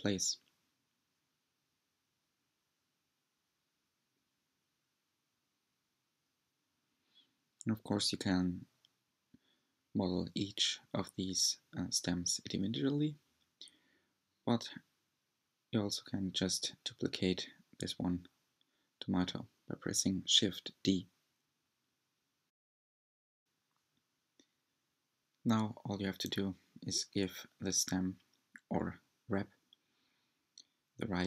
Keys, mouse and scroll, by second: 3.6-4.1 scroll up 3, 4.1-6.7 middle drag, 6.7 drag, 7.9 s, 16.1-19.3 middle drag, 19.7 Tab, 19.8-20.1 scroll down 6, 20.0 shift+middle click, 20.1 Tab, 20.2 click, 20.4 shift+click, 20.5-24.6 typing, 21.2 click, 21.2 scroll down 1, 21.3 shift+middle click, 21.8 scroll up 4, 22.3 click, 22.6 middle click, 22.8 scroll up 3, 23.7 shift+middle click, 23.8 scroll down 4, 23.8 middle click, 24.0 click, 24.4 scroll up 3, 24.5 shift+middle click, 25.2-25.5 scroll up 7, 25.2 middle click, 25.5 click, 25.7 Tab, 26.0-31.2 typing, 26.1 click, 26.5 Tab, 26.5-26.9 scroll down 15, 26.6 middle click, 26.9 click, 27.0 shift+click, 27.5 shift+click, 27.5 shift+click, 28.6 click, 28.7 scroll down 1, 28.8 shift+middle click, 29.2 scroll up 7, 29.3 shift+middle click, 29.5 click, 30.3 shift+middle click, 30.5 click, 30.9 middle click, 31.1 scroll up 4.